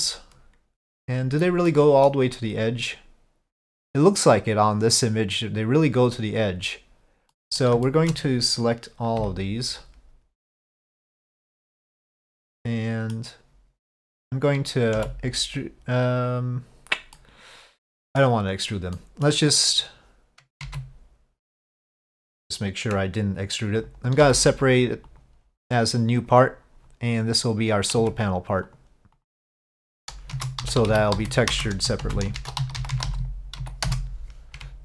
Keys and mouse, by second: 1.8 middle click, 3.7 middle click, 7.4 middle click, 7.9 shift+middle click, 12.5 middle click, 17.3 middle click, 19.0 middle click, 20.7 ctrl+z, 27.6 click, 28.1 Tab, 29.3 click, 30.3-34.8 shift+drag.